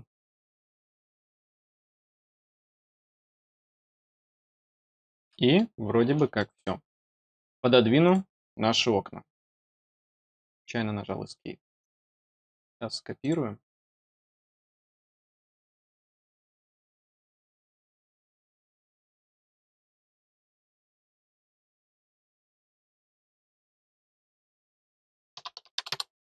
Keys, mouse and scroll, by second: 0.3 scroll down 4, 0.9 middle click, 4.1-5.5 middle drag, 5.8-6.2 scroll up 3, 6.3 middle click, 8.0 click, 9.9 scroll down 1, 10.2 middle click, 11.7 click, 13.1 click, 14.5 click, 18.4-20.1 scroll down 2, 20.1 click, 22.0 click, 23.0 middle click, 24.0 click, 24.4 click, 26.1-26.4 scroll down 2.